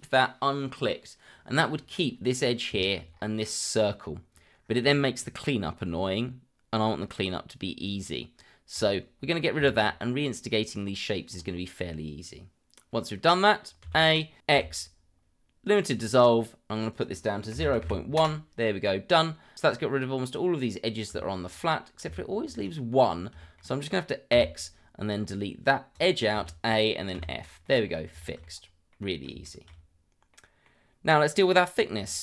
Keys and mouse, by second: 2.8 shift+middle click, 8.7 click, 9.6 shift+middle click, 13.8 a, 14.5 x, 16.9-18.2 drag, 21.6 shift+middle drag, 22.0 Tab, 22.6 click, 23.4 shift+middle drag, 24.3 x, 26.3 a, 27.1 f, 27.6 middle click, 28.2 shift+middle click, 28.9 middle click, 29.4 shift+middle drag, 30.3-30.6 middle drag.